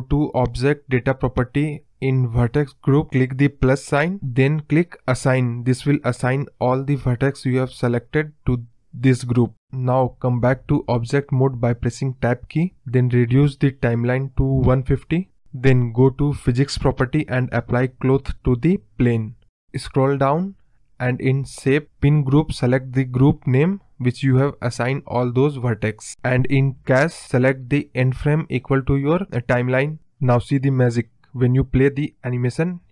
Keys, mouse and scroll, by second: 0.2 shift+click, 0.8 shift+click, 2.2 click, 2.8-4.8 drag, 5.3 click, 6.1 scroll up 3, 6.3-7.6 scroll down 2, 7.6 Tab, 10.6-13.6 drag, 15.0 click, 16.1 click, 17.4 click, 18.0-18.5 scroll down 2, 18.5-19.1 scroll up 1, 19.1 scroll up 1, 19.5-21.0 scroll down 21, 21.0 click, 21.1-21.6 scroll down 1, 21.6-23.2 drag, 24.9-25.5 drag, 25.5-26.0 scroll down 1, 26.0-27.6 drag, 28.0 scroll down 2, 28.2-29.3 middle drag, 29.3 space, 30.1 scroll up 3, 30.3-32.2 middle drag, 32.2 scroll up 1, 32.3-32.9 middle drag.